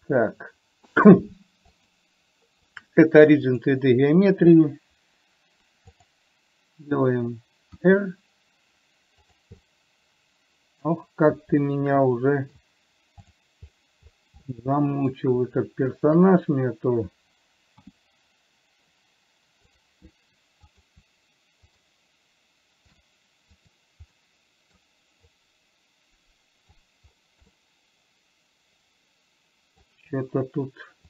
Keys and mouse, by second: 1.4-4.0 drag, 6.3 click, 8.1 r, 9.9-11.3 middle drag, 12.0-12.9 middle drag, 13.6 drag, 14.8-15.4 middle drag, 16.3 shift+click, 18.1 g, 21.0 click, 22.0 shift+click, 23.3 click, 24.0 click, 24.4 middle click, 25.8-27.1 drag, 27.9-30.3 middle drag.